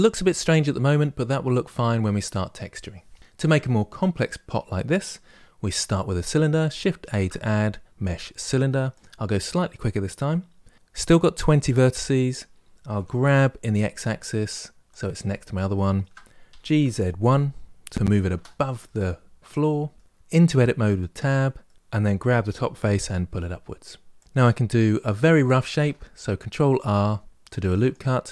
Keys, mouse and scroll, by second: 3.2 click, 6.8 shift+a, 12.7 g, 15.0-16.2 shift+middle drag, 16.2 g, 18.6-20.0 middle drag, 20.9 Tab, 21.4 middle click, 21.7 click, 22.2 g, 25.5 ctrl+r.